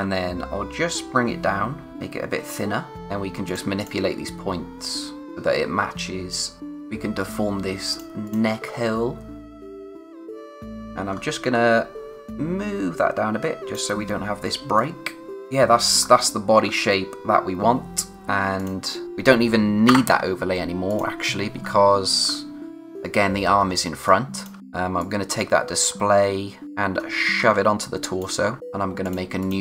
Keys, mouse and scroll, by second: 2.9 click, 8.6-9.5 scroll up 1, 9.5 click, 10.8-12.2 scroll up 1, 12.2 click, 15.3 scroll up 1, 15.9-16.6 scroll down 1, 18.5 click, 19.8 Return, 20.9 click, 21.5-22.2 scroll down 1, 23.7 space, 24.0 click, 24.2 space, 25.0 click, 25.5-26.6 scroll down 1, 27.0 space, 28.6-29.0 scroll up 1, 29.0 click.